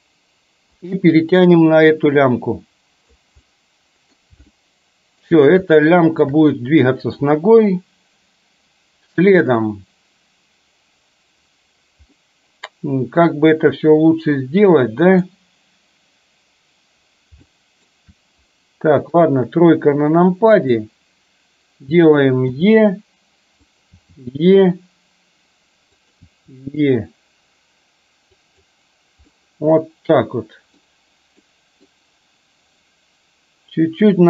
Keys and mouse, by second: 0.9-3.2 drag, 3.4 middle click, 4.6 shift+middle click, 5.7 shift+middle click, 12.2-15.4 middle drag, 17.6 shift+middle click, 19.2 KP_3, 20.6 click, 22.6 e, 23.9 e, 26.3 e, 29.3-30.9 middle drag, 31.4 middle click.